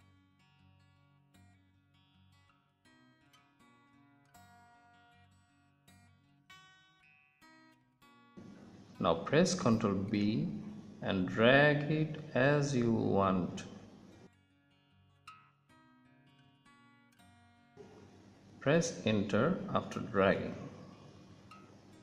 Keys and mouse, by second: 2.3 click, 4.0 click, 4.3 middle click, 5.3 middle click, 7.1-9.8 middle drag, 11.1 ctrl+b.